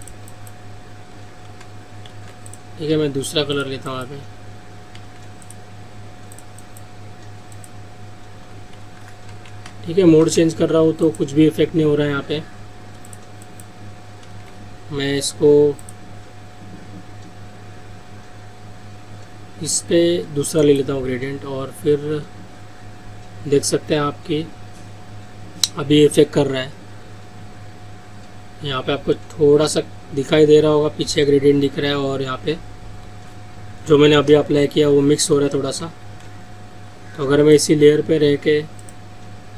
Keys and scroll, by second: 2.1 ctrl+z, 8.8 ctrl+z, 9.7 ctrl+alt+z, 14.4 ctrl+z, 35.9 ctrl+alt+z.